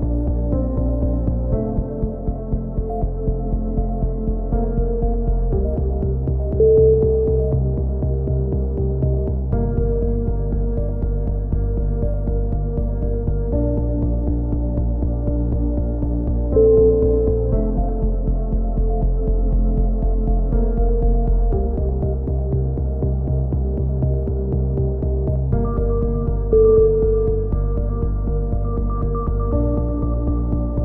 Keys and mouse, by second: 0.5-2.6 drag, 2.9 click, 4.4 x, 4.7 Tab, 4.7 click, 5.0 right click, 5.4 a, 5.7 Tab, 6.4 a, 6.7 click, 7.3 r, 8.5 s, 9.3 right click, 9.4-10.7 drag, 10.4 right click, 10.8 click, 11.4-12.7 drag, 11.6 right click, 13.5 click, 13.5 right click, 14.5-15.9 drag, 15.7 right click, 16.0 click, 16.5 right click, 16.8 click, 17.6 a, 18.2 click, 18.2 right click, 18.9 right click, 19.2 click, 21.2 right click, 21.9 g, 23.4 a, 23.7 right click, 24.5 e, 24.9-25.9 drag, 26.2 a, 26.6 ctrl+r, 28.0-29.3 drag, 28.4 a, 29.3 right click, 29.3 g.